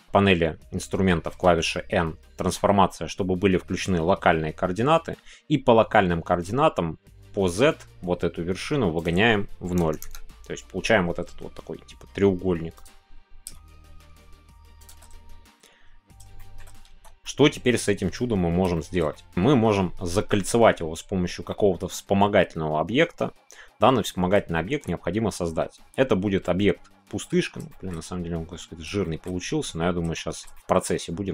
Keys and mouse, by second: 1.3 n, 12.9 click, 14.8 click, 16.3 shift+middle click, 16.9 Tab, 17.2 middle click, 18.8 middle click, 19.1 middle click, 21.5-22.2 middle drag, 22.4-23.8 middle drag, 24.0 shift+middle click, 24.5 middle click, 26.4-27.6 middle drag, 27.7 shift+middle click, 29.0 shift+middle click, 30.1-31.3 shift+middle drag.